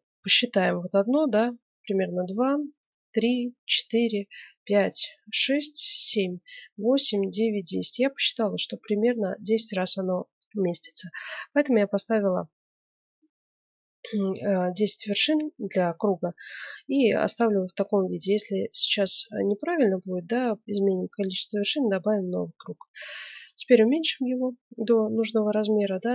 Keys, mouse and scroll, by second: 20.2 s.